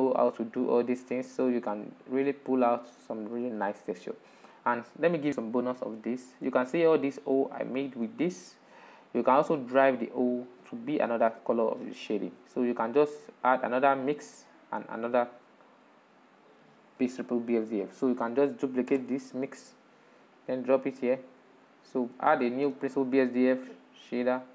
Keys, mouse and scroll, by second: 1.1-1.5 scroll down 7, 2.2-13.8 middle drag, 13.8 click, 14.8-16.7 drag, 17.2-17.6 scroll up 4, 18.0 click, 19.2 shift+d, 21.2 click, 22.1-22.9 shift+middle drag, 22.9 shift+a.